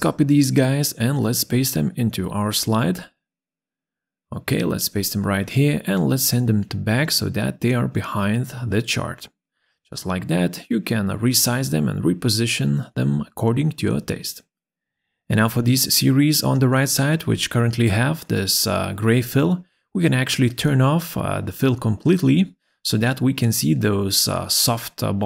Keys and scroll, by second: 0.3 ctrl+c, 4.8 ctrl+v.